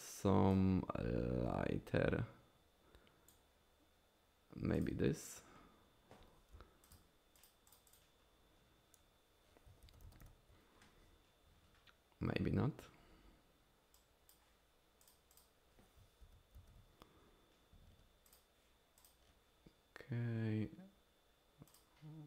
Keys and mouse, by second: 0.5-3.5 drag, 6.6 f, 7.4 click, 7.7 click, 9.8 ctrl+z, 10.0 ctrl+z, 10.2 ctrl+z, 14.0 click, 15.0 click, 15.3 click, 16.2 ctrl+z, 16.5 ctrl+z, 19.0 click, 21.7 click.